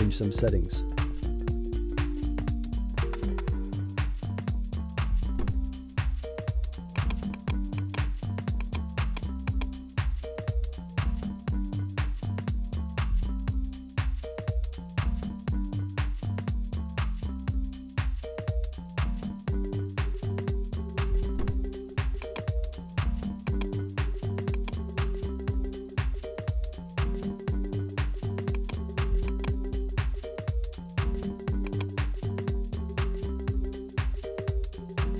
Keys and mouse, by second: 4.9-8.9 drag, 9.3 click, 9.7 click, 10.3-12.8 drag, 13.8-16.5 drag, 17.3-19.8 drag, 22.8 click, 23.5-28.0 drag, 28.5-31.8 drag.